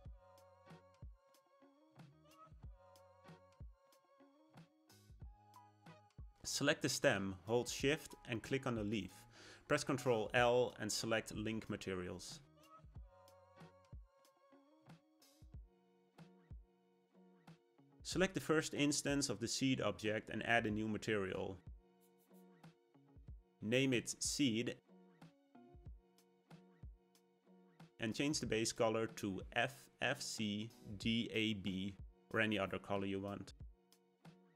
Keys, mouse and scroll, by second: 4.5 click, 5.0 middle click, 5.5-7.0 scroll up 2, 7.0 click, 8.5 shift+click, 10.3 ctrl+l, 13.7 click, 14.3 scroll down 1, 14.5-17.6 middle drag, 17.9 click, 18.7-21.3 middle drag, 21.3-23.2 drag, 23.2 e, 28.1 click.